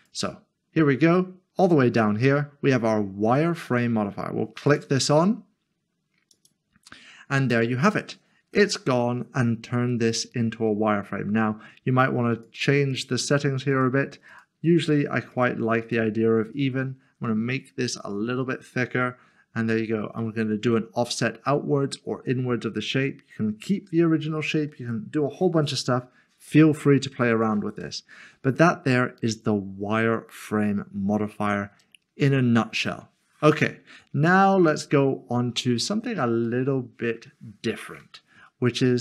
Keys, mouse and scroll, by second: 0.0 click, 4.7 click, 6.3 click, 8.5 click, 8.7 middle click, 12.3 click, 12.8 double click, 13.7 click, 14.8 double click, 18.7 click, 27.3 click, 28.0 middle click, 33.5 click, 36.5 middle click.